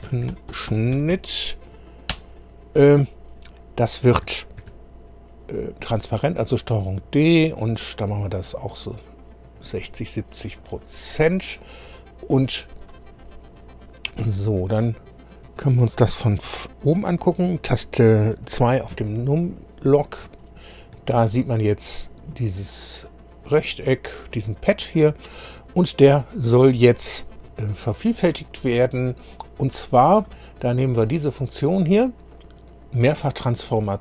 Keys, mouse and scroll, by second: 0.0-1.6 typing, 2.1 Return, 4.6 ctrl+d, 6.7-9.9 drag, 10.6 click, 14.1 click, 18.9 2, 19.8 scroll down 2, 20.4 shift+middle click, 21.2-21.9 shift+scroll up 5, 24.7 click, 33.7 click.